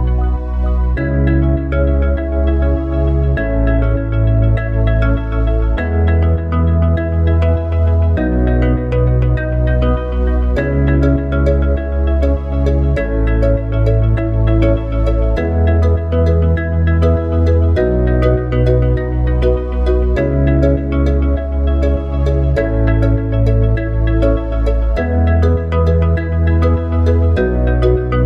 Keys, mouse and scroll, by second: 8.2 click, 15.3 KP_0, 22.8-28.2 drag.